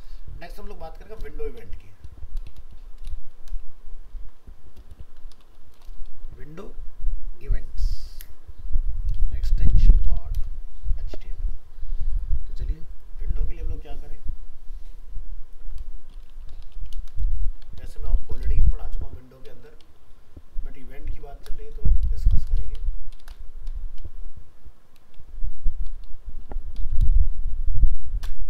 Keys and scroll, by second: 0.5 alt+f, 0.6 alt+释, 4.1 shift+Right.